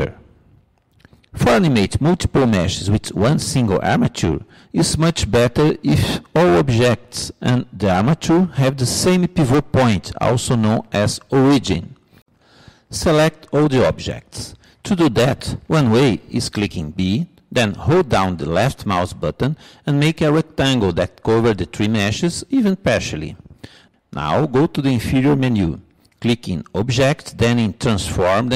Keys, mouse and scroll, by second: 15.7 b.